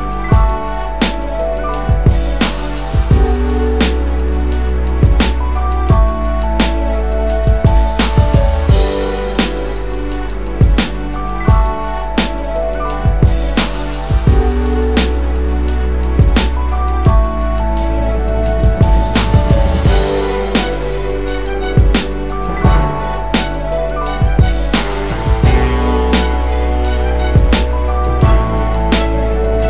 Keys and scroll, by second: 8.6 BackSpace, 13.5 BackSpace, 14.2 BackSpace, 15.1 BackSpace.